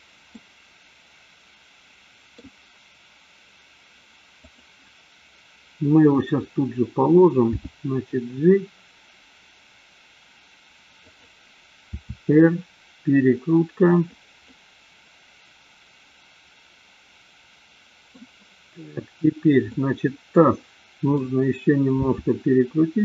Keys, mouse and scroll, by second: 0.3-2.6 middle drag, 4.4 click, 7.4 g, 11.9 r, 14.4-18.1 middle drag, 19.8-21.2 middle drag, 21.9 r.